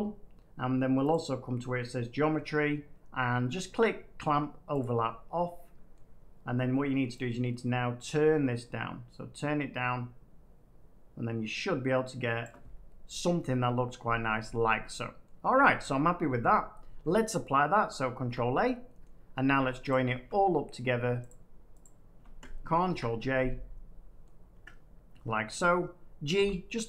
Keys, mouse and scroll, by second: 1.0 click, 4.7 click, 5.9 middle click, 8.1-10.1 middle drag, 12.4 shift+click, 13.2 middle click, 14.0 middle click, 15.2 middle click, 17.0 middle click, 18.1 ctrl+a, 19.0 middle click, 19.0 scroll down 1, 19.8 shift+click, 20.7 middle click, 21.2 shift+click, 21.8 shift+click, 22.8 ctrl+j, 24.2 middle click, 24.5 Tab, 25.1 Tab, 26.3 g.